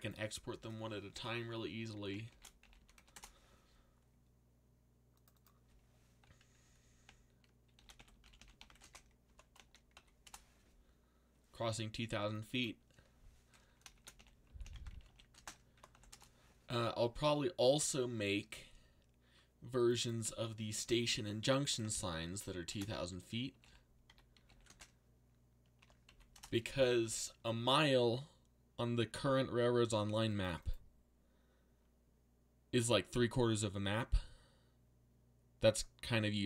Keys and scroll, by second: 2.0-3.4 typing, 7.5-9.9 typing, 10.2 Return, 13.7-16.4 typing, 22.4-24.6 typing, 25.8 2, 26.1 k, 26.3 Return.